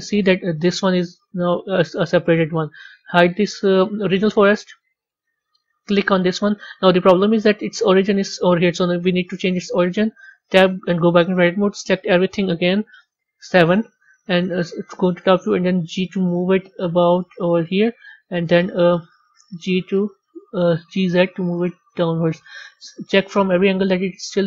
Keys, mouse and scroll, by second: 0.1 click, 0.8 g, 2.8 click, 3.6-3.9 scroll down 1, 4.2-5.0 scroll up 1, 5.0 click, 5.8 click, 7.5-9.0 scroll up 3, 10.3 b, 13.0 KP_7, 18.1 KP_1, 22.5-24.4 middle drag, 24.4 scroll up 5.